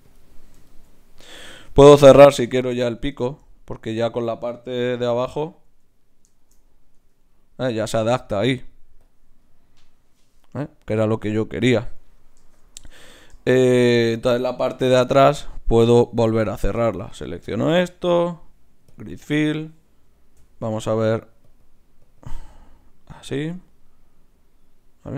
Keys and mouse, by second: 1.9 ctrl+Tab, 4.7 KP_Divide, 5.6 z, 6.9 Tab, 9.0-12.8 drag, 12.8 Tab, 14.6 KP_Divide, 16.5-18.9 drag, 17.6 shift+q, 18.9-20.0 middle drag, 20.4 F6, 21.6-24.1 drag, 23.6-25.1 middle drag.